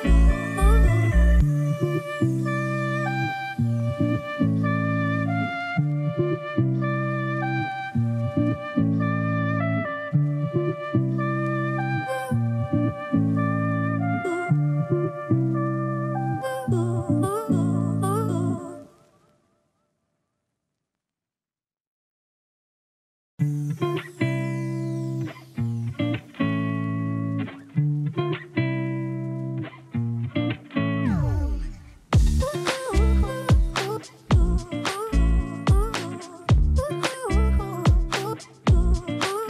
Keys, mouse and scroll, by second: 9.5 typing, 9.9 Return, 11.1 click, 12.9 space, 13.1 click, 14.2-18.6 alt+drag, 19.0 space, 19.1 click, 19.5 space, 21.0 click, 24.0-29.5 typing, 26.9 shift+Return, 31.0 click, 31.0-39.4 drag.